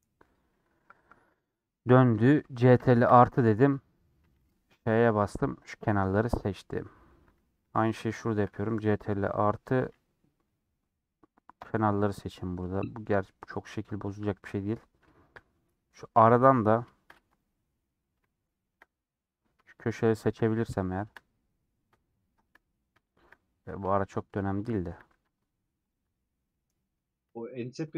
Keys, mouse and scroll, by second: 0.9-1.3 scroll down 3, 2.8 ctrl+KP_Add, 4.8 ;, 5.5-7.0 middle drag, 7.0 scroll down 1, 7.1-7.7 scroll up 1, 7.7 3, 9.0 ctrl+KP_Add, 11.6 ;, 12.0-14.8 middle drag, 14.8 scroll up 2, 15.1 shift+middle click, 15.3 scroll down 1, 15.4 scroll up 1, 15.6 middle click, 16.3-17.3 scroll up 2, 17.3 scroll up 1, 17.4 alt+Left, 17.9 scroll down 2, 18.1 shift+middle click, 18.9-20.2 scroll up 2, 20.2 alt+shift+click, 20.5 scroll down 1, 20.7 shift+middle click, 21.1-21.4 scroll up 3, 21.4-22.7 middle drag, 22.7 scroll up 1, 23.0 shift+middle click, 23.4 scroll up 1, 23.7 scroll down 1, 24.7 alt+shift+click, 25.2 ctrl+z, 26.0 alt+shift+click, 26.1-27.8 shift+middle drag, 27.8 alt+shift+click.